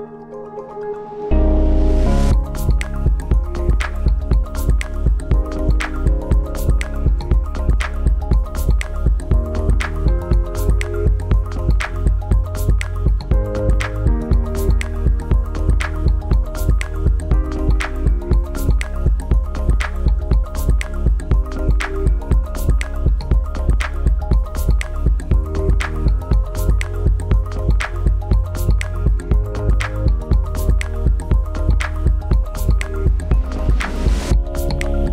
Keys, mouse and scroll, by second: 6.4 click.